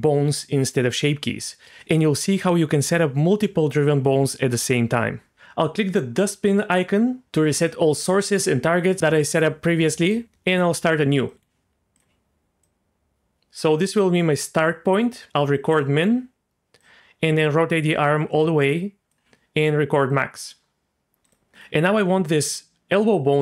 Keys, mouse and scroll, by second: 10.0 click, 11.3 drag, 11.3 r, 11.9 click, 12.6-13.7 drag, 15.7 click, 16.8 click, 16.9-19.1 drag, 20.1 click, 21.2 click, 21.5 r, 21.9 r.